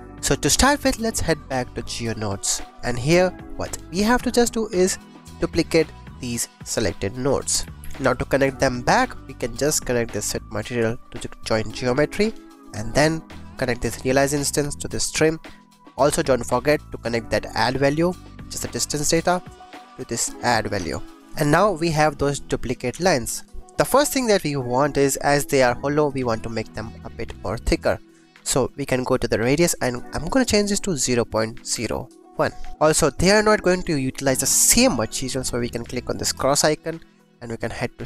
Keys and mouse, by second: 1.6 middle click, 3.4 click, 4.6 click, 4.9 click, 5.7-6.3 drag, 6.7 shift+click, 7.5 g, 7.8 g, 8.2 click, 8.5 click, 8.8 click, 9.3 click, 10.2-11.8 drag, 12.3 click, 13.9-15.1 drag, 15.4 click, 16.6 click, 17.3 click, 18.4 click, 19.1-20.6 drag, 21.4 click, 24.0 shift+click, 24.5-24.8 drag, 25.5 click, 26.1 shift+drag, 27.5 click, 28.6 click, 29.7-32.2 drag, 32.7 ctrl+s, 32.7 click, 32.9 click, 36.3 click, 37.9 click.